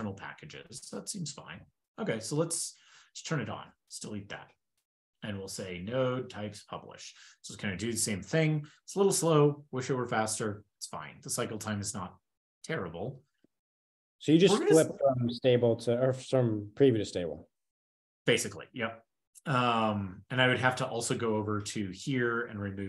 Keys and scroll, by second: 2.8 shift+super+[, 3.5 ctrl+shift+k, 3.9 super+s, 4.3 ctrl+super+Return, 4.8 ctrl+shift+k, 4.9 ctrl+l, 6.2 ctrl+e, 19.0 super+p, 22.2 super+f.